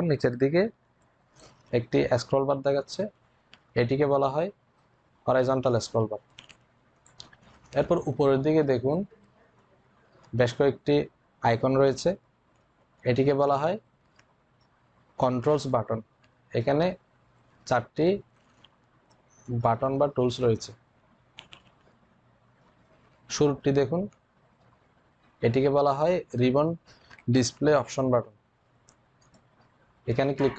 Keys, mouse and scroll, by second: 29.0 click, 29.1 click.